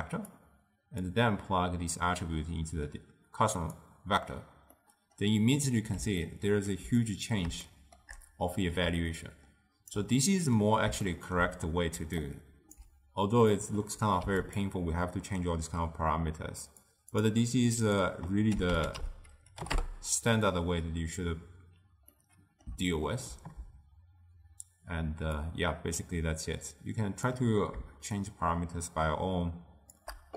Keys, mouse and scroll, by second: 4.8-8.9 middle drag, 8.9 d, 9.2 right click, 10.1 d, 10.3 middle click, 11.1-12.1 ctrl+middle drag, 12.1 d, 12.3-13.6 right drag, 13.6-14.7 drag, 16.8 click, 17.9-20.9 drag, 22.2-25.5 middle drag, 25.5-30.3 shift+drag.